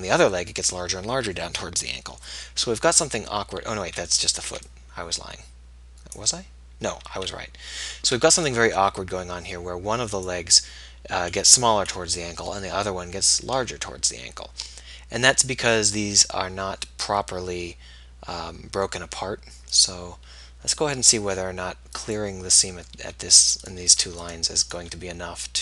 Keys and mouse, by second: 3.5 middle click, 4.0 a, 4.5 b, 7.3 a, 8.2 b, 14.5-20.0 middle drag, 20.0-22.2 right drag, 22.2 click, 22.9-25.6 middle drag, 23.7 click, 23.7 right click.